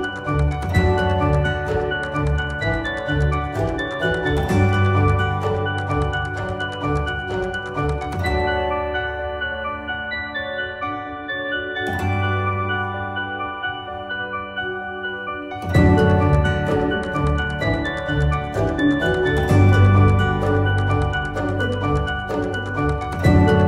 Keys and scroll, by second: 15.4-16.3 typing, 17.1 ctrl+z, 20.0 ctrl+z, 21.1 z, 22.8 ctrl+z.